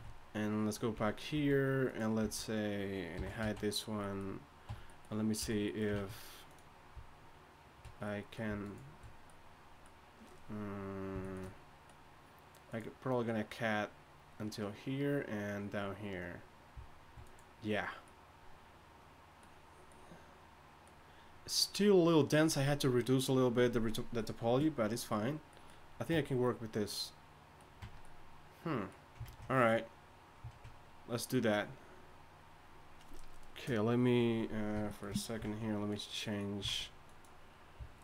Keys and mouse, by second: 0.9 z, 1.3 z, 3.1 z, 3.1 h, 3.4 z, 4.7 Tab, 5.4 a, 5.9 ctrl+Tab, 9.5-24.9 drag, 26.1 Tab, 27.8 Tab, 29.2 ctrl+Tab, 35.4 ctrl+Tab, 36.6 ctrl+Tab.